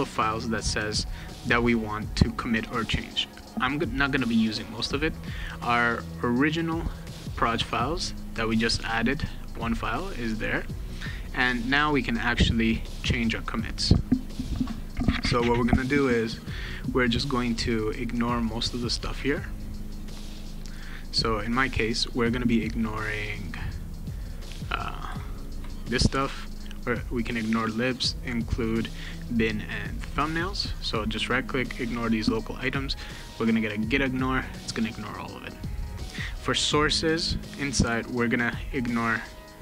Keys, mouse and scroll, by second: 4.5 click, 5.7 click, 7.2 click, 7.5 click, 10.6 click, 11.4 click, 14.9 space, 15.7 click, 17.0 click, 18.1 click, 19.3 click, 20.3 click, 21.4 click, 22.7 click, 23.7 click, 25.3 shift+click, 26.7 ctrl+click, 27.9 ctrl+click, 29.0 ctrl+click, 29.8 ctrl+click, 30.5 right click, 31.8 click, 35.5 click, 36.8 click, 38.1 ctrl+click.